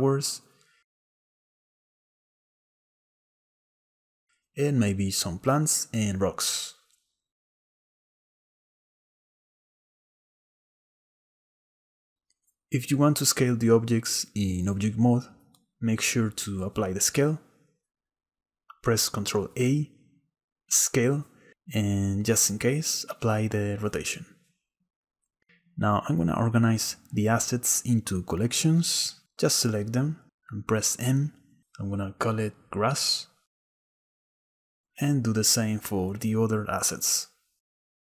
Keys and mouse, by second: 8.2 click, 9.0 click, 9.3 click, 9.5 click, 10.0 click, 10.7 click, 12.1 click, 12.7 s, 13.8 drag, 14.0 s, 15.2 s, 17.3-18.2 drag, 19.9 ctrl+a, 27.2-27.8 drag, 29.6 m, 32.1 s, 34.3-34.9 drag, 35.2 m, 36.1 KP_Enter, 36.3 shift+middle click, 36.6 click, 37.2 m, 37.9 KP_Enter.